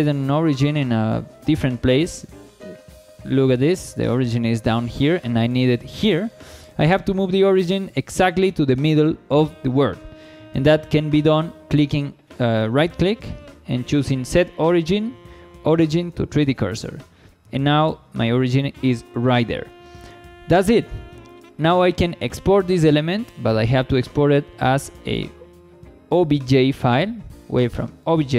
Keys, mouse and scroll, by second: 1.0 shift+middle drag, 4.7-5.0 shift+middle drag, 6.4 shift+middle drag, 7.0 scroll up 1, 7.4 shift+middle click, 11.0 shift+middle drag, 12.6-16.6 right drag, 18.7 scroll down 2, 19.1 shift+middle drag, 19.5 scroll down 1, 19.9 shift+middle click, 23.2-28.2 drag.